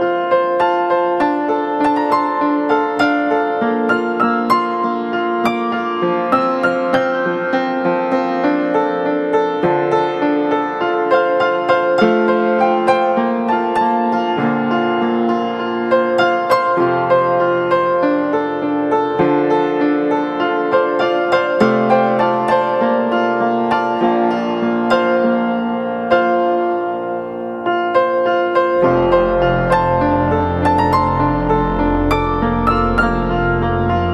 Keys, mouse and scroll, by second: 26.2 ctrl+t, 27.3 ctrl+-, 27.6 ctrl+-, 28.8 alt+shift+click, 32.2 Return, 33.2 ctrl+=.